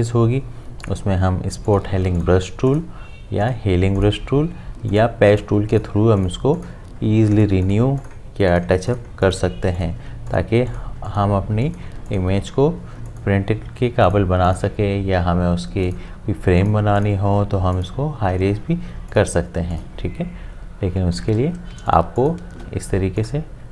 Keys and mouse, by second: 21.4 ctrl+z, 21.7 space, 21.9 ctrl+click.